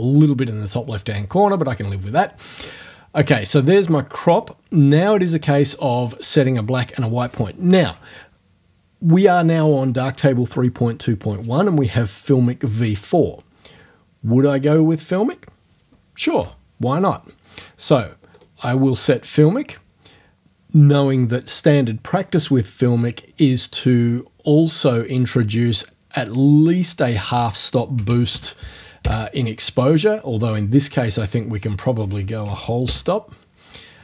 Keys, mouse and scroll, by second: 1.6 click, 2.0-6.4 middle drag, 18.3 click, 18.6-21.3 middle drag, 26.7 right click, 28.0 KP_0, 28.1 KP_Decimal, 28.3 KP_5, 29.1 KP_Enter, 31.8 right click, 32.5 KP_1, 32.9 KP_Enter.